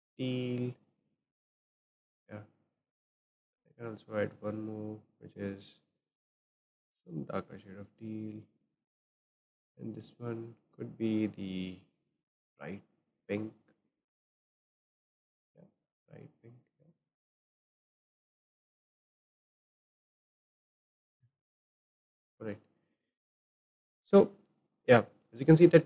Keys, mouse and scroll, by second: 2.3 click, 3.2-5.3 drag, 9.3 click, 13.2 click, 14.3-21.5 drag, 21.5-23.0 scroll down 7, 22.0-25.8 shift+middle drag, 23.0-25.5 scroll down 1.